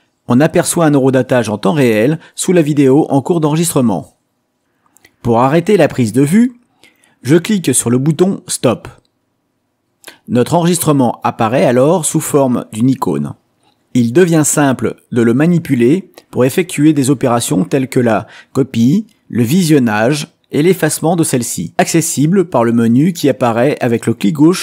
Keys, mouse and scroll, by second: 5.1 click, 10.4 right click, 17.8 click, 18.7-21.2 drag.